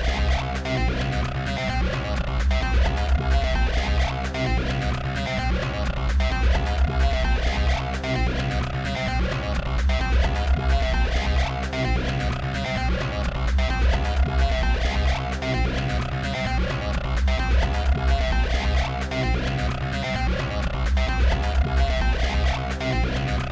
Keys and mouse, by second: 0.0-1.1 typing, 3.2-6.5 typing, 7.6-13.0 typing, 10.0 ctrl+z, 10.2 ctrl+z, 10.3 ctrl+z, 11.6 right click, 12.1 right click, 14.0-18.2 typing, 14.1 ctrl+z, 19.5-22.1 typing, 23.1 a.